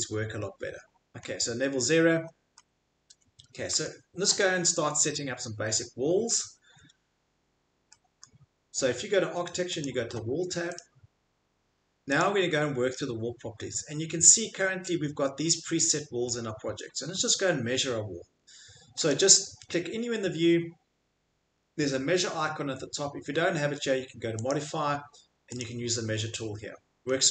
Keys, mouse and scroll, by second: 0.7 Escape, 1.2 middle click, 3.7 Escape, 3.8 click, 5.7 click, 8.2 click, 9.8 click, 10.7 click, 12.2 click, 16.6 Escape, 16.9 Escape, 17.1 Escape, 23.1 click, 24.5 click, 25.6 click, 27.1 click.